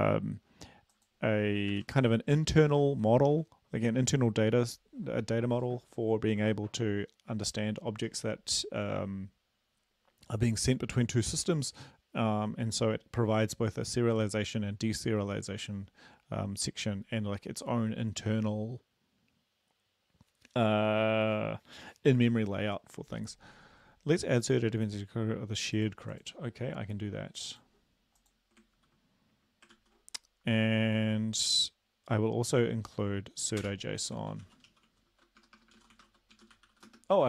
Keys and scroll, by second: 1.7 ctrl+`, 28.7 ctrl+v, 29.7 ctrl+s, 33.6 Return, 34.2-36.8 typing.